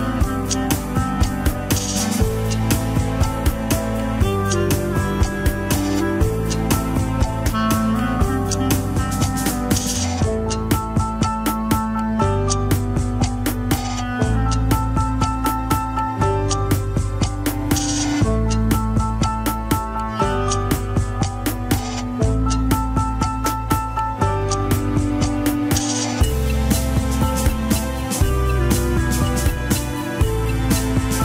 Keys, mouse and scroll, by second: 0.0 KP_1, 0.2-0.7 scroll up 2, 0.4 shift+middle drag, 1.1 ctrl+Tab, 1.3 alt+z, 1.7 alt+z, 2.4 shift+click, 2.8 click, 3.1 alt+z, 3.4 r, 5.2 click, 5.6 r, 7.4 alt+z, 7.8 r, 9.7 shift+click, 10.1 shift+click, 10.5 r, 12.5 click, 13.1 r, 14.4 r, 16.4-18.7 shift+middle drag, 18.7 click, 19.4 g, 20.2 middle click, 20.9 g, 23.2 KP_3, 23.6-26.1 shift+middle drag, 26.1-26.9 scroll down 2, 26.9-27.4 scroll down 1, 27.4 click, 27.7 g.